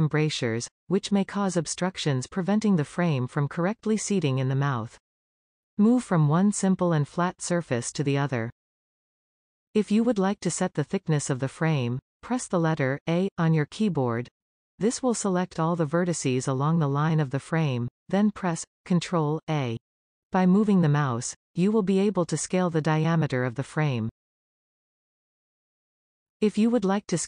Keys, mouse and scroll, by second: 2.0 scroll down 1, 2.2 e, 2.5 e, 3.0 shift+middle click, 3.5 e, 4.0 e, 4.7 shift+middle click, 5.3 e, 8.7-11.5 scroll down 1, 11.5-13.1 scroll down 1, 13.1 a, 17.8 ctrl+a.